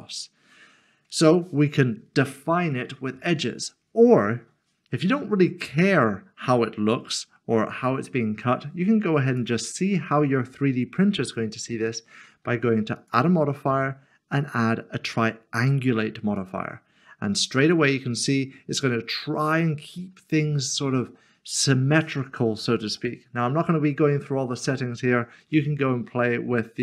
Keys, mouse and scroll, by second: 3.5 middle click, 9.3 click, 13.0 click, 16.4 click, 17.4 middle click, 25.5 middle click.